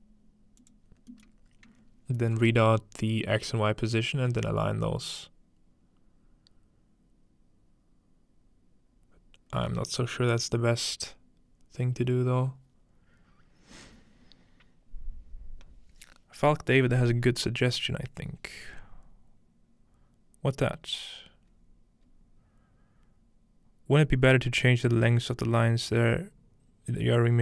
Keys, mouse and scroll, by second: 0.6-2.8 drag, 0.9-2.8 scroll down 1.